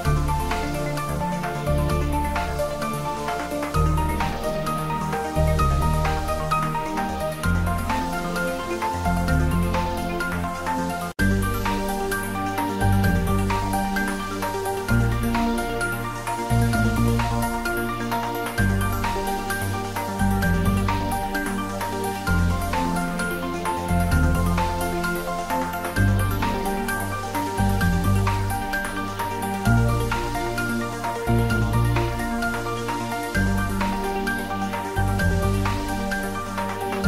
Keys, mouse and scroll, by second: 0.5 shift+click, 0.9 middle click, 1.7 ctrl+middle click, 2.2 middle click, 3.1 Tab, 4.4 middle click, 4.9 shift+middle click, 5.5 ctrl+middle click, 6.6 middle click, 7.4 Tab, 7.7 middle click, 8.8 click, 10.5-11.9 middle drag, 11.9 click, 12.3 shift+z, 13.4 shift+click, 16.5 shift+middle click, 17.3 Tab, 18.2 shift+z, 19.0 ctrl+a, 19.3 click, 19.7 Tab, 21.2 ctrl+b, 25.8 click, 25.9 Tab, 26.2 middle click, 26.7 ctrl+middle click, 27.1 shift+middle click, 27.6 Tab, 27.8 middle click, 28.6 middle click, 29.3 ctrl+r, 30.8 click, 32.9 ctrl+r, 33.4 click, 34.6 Tab, 34.9 middle click, 35.6 Tab, 36.2 ctrl+r.